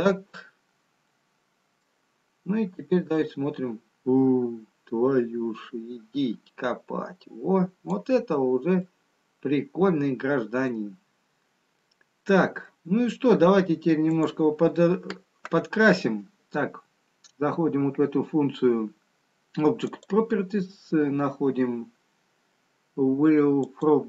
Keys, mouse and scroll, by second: 2.3 middle click, 2.3-4.1 scroll down 2, 4.1 click, 9.1 middle click, 9.1-10.5 scroll up 2, 11.9-15.9 scroll down 2, 16.6 click, 20.2 click, 22.3-23.0 scroll down 2, 23.9 click.